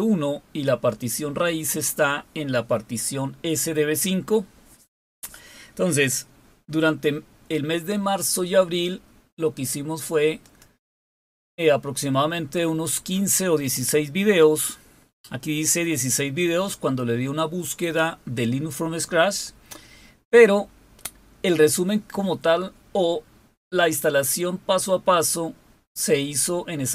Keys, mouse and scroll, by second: 10.2 click, 12.7-13.6 scroll down 6, 14.1-19.2 scroll down 2, 19.2-22.6 scroll up 2.